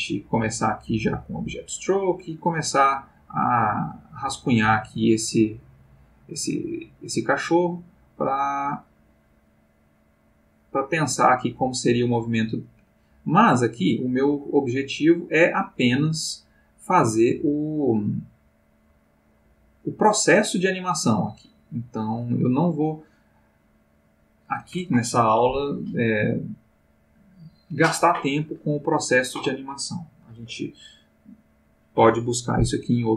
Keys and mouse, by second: 2.2 click, 3.7 click, 5.1-6.3 drag, 6.5-8.8 drag, 10.4 click, 11.5 click, 13.1 click, 13.5 click, 14.3-17.1 drag, 17.3 click, 18.8-22.5 drag, 22.5-24.1 drag, 24.2 click.